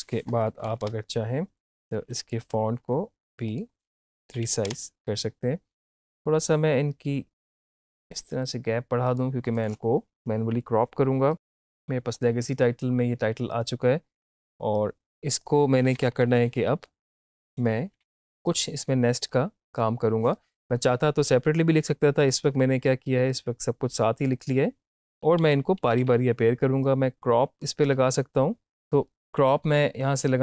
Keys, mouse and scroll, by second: 2.4 click, 5.8-15.9 drag, 15.9 =, 16.0 =, 16.2 =, 17.2 click, 17.9 Up, 18.5-22.3 drag, 24.9-26.5 typing, 26.8-28.7 drag.